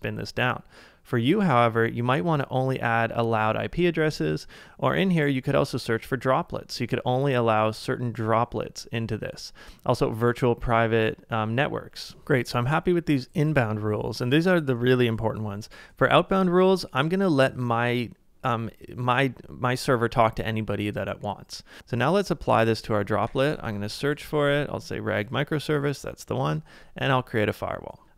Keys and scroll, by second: 23.2-24.1 typing, 28.0 super+Tab.